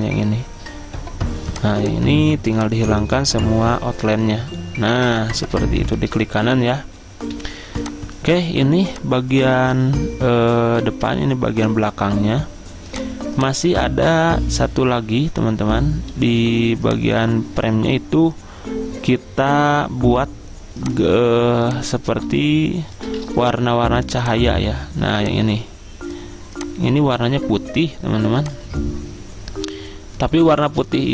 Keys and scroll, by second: 7.5 z, 16.5 z.